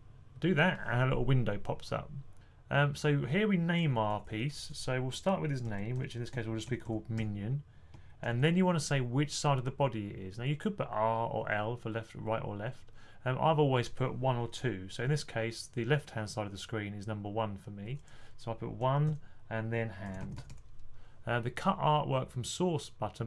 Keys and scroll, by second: 5.3-8.1 typing, 17.5-20.8 typing.